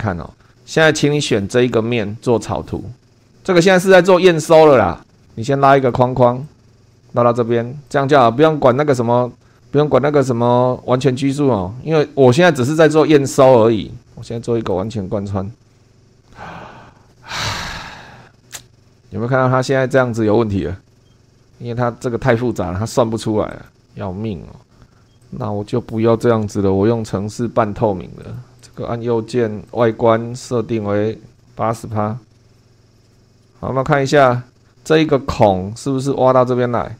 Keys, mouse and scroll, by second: 0.5 click, 0.5-1.1 scroll down 3, 1.6 click, 3.9 click, 5.1 shift+middle click, 5.7 click, 6.4 click, 6.9 click, 7.9 click, 9.5 click, 14.2 click, 14.7 click, 20.6 middle click, 21.4-23.5 scroll down 2, 23.5 click, 25.2 click, 26.4 Delete, 28.2 click, 28.6 right click, 29.7 click, 31.4 click, 32.3 8, 32.6 click, 32.9 click, 33.3 click, 33.5 shift+click, 33.9 shift+scroll up 2, 34.4 shift+click, 34.6 shift+scroll up 2.